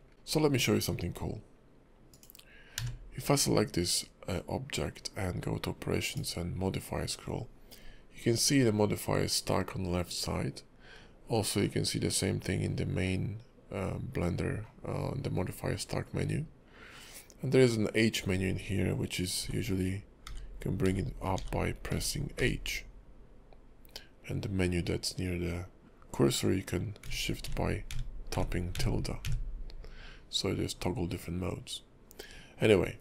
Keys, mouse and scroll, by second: 0.1-2.1 scroll down 1, 2.1 click, 2.7 q.